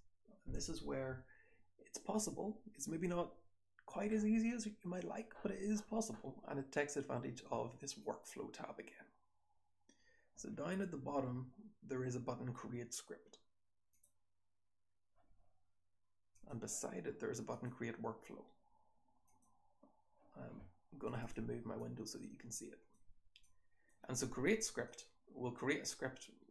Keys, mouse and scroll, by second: 8.0 click, 13.9 click, 19.2 click, 22.5-22.9 drag, 24.8 click.